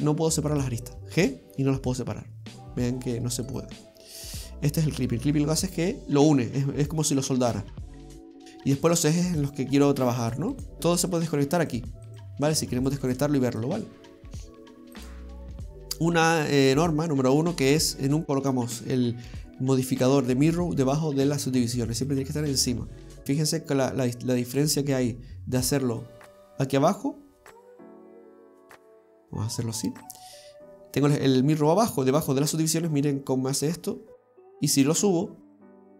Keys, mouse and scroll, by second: 0.5 click, 1.2 g, 4.2-4.9 scroll up 2, 4.9 ctrl+z, 7.6 scroll down 2, 7.9 middle click, 9.4 click, 9.8 click, 10.3-10.8 click, 10.6 click, 10.8-11.1 scroll down 1, 11.1 click, 11.6 click, 12.1 click, 12.5 click, 12.8 click, 12.9 click, 13.1 click, 13.5 click, 15.0 click, 22.1 click, 22.5 click, 23.2-24.4 scroll up 1, 24.4 click, 24.6 click, 26.0 click, 29.1 click, 29.8 click, 30.1 click, 34.9 click.